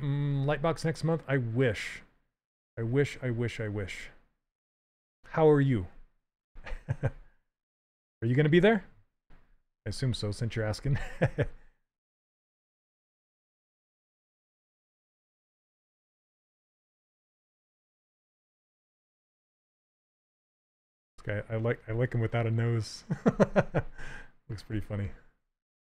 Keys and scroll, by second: 10.2 s, 14.2 s.